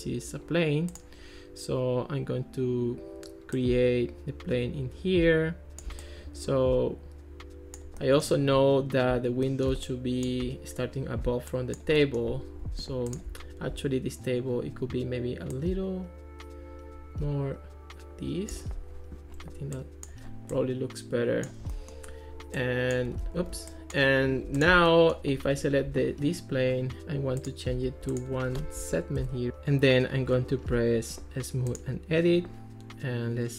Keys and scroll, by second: 23.2 super+z, 27.9 1, 29.2 Return.